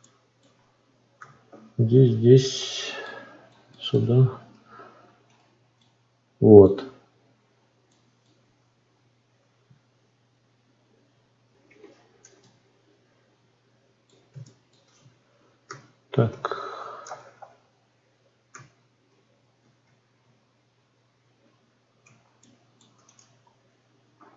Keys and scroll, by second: 11.7 F9.